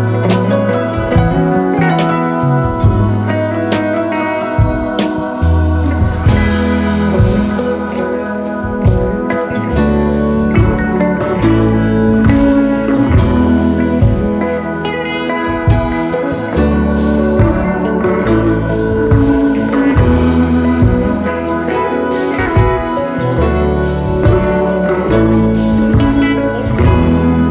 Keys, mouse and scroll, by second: 1.9-2.4 scroll up 7, 5.3-27.5 drag.